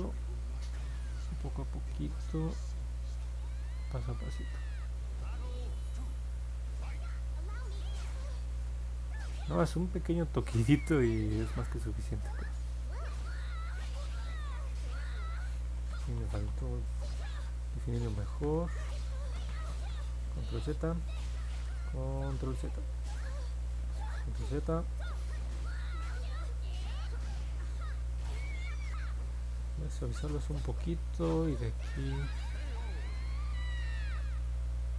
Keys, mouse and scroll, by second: 0.3 click, 1.2 click, 1.7 click, 2.3 click, 3.6 click, 4.4 click, 5.1 click, 9.4 click, 10.4 click, 12.2 click, 15.6 ctrl+z, 15.8 ctrl+z, 16.1 ctrl+z, 16.4 ctrl+z, 17.8 ctrl+z, 18.1 ctrl+z, 18.4 ctrl+z, 19.2 ctrl+z, 19.4 ctrl+z, 19.6 ctrl+z, 19.8 ctrl+z, 21.4 ctrl+z, 21.6 ctrl+z, 21.8 ctrl+z, 22.0 ctrl+z, 22.1 ctrl+z, 23.9 ctrl+z, 24.1 ctrl+z, 24.3 ctrl+z, 34.1 middle click, 34.1-34.6 scroll down 3.